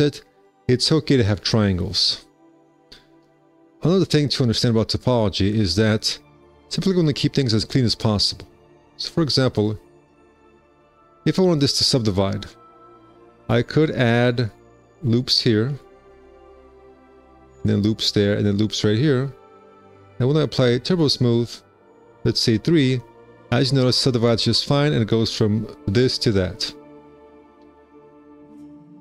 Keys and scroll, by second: 4.3 4, 5.6 w, 6.3 `, 7.0 1, 13.7 alt+s, 20.1 2, 20.3 q, 21.6 F4, 22.6 3, 27.2 F4, 27.6 w.